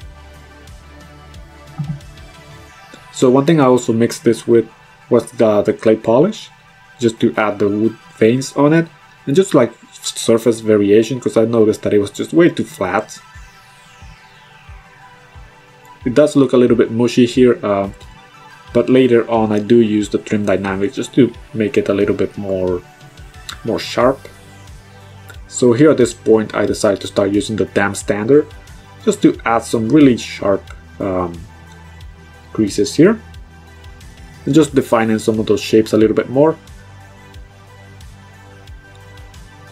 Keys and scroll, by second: 8.6 ctrl+z, 16.3 b, 22.9 ctrl+z, 23.3 ctrl+z, 30.1 ctrl+z.